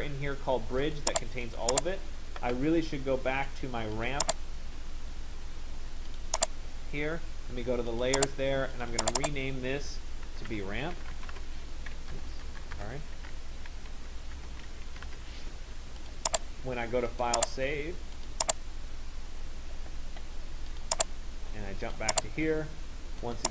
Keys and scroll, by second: 10.2 ctrl+a, 12.4 BackSpace, 14.6 shift+BackSpace.